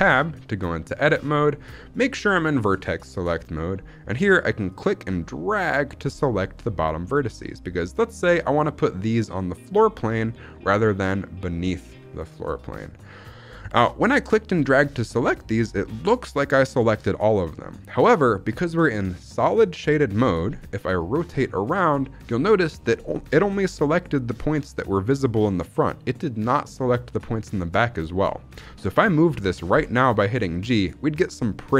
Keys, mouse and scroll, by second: 4.6-7.7 drag, 14.1 click, 15.3 scroll up 1, 21.0-22.2 middle drag, 22.3-22.7 scroll down 2, 22.7 middle click, 27.9 middle click, 29.6 g.